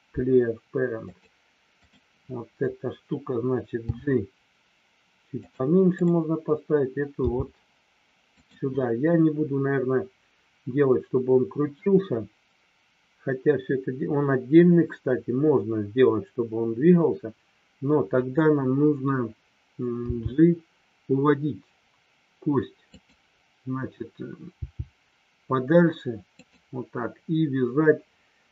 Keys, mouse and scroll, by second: 1.8 click, 5.4 click, 5.9 click, 8.3 click, 22.9 click, 26.3 click.